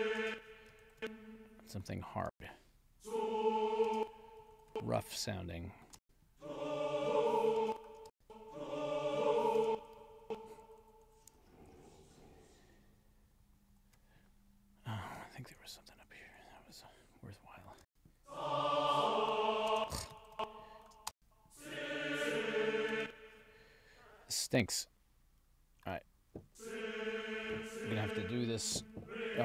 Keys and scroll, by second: 0.2 space, 0.8 alt+Up, 2.3 space, 3.9 space, 4.5 alt+Up, 6.0 space, 7.6 space, 9.6 space, 10.1 alt+Down, 10.6 alt+Up, 11.7 alt+Down, 15.4 alt+Up, 17.8 space, 19.7 space, 20.2 alt+Up, 21.1 space, 22.9 space.